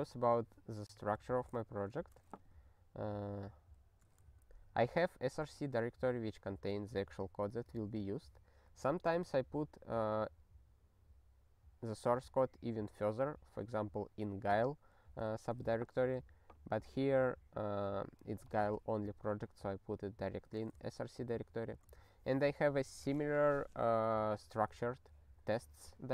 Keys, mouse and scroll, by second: 1.3 ctrl+g, 1.7 ctrl+j, 2.4 ^, 2.5 ^, 4.4 ctrl+p, 4.8 ctrl+n, 4.9 ctrl+n, 5.4 ctrl+p, 5.6 Return, 20.3 ^, 20.9 ctrl+n, 21.6 Return.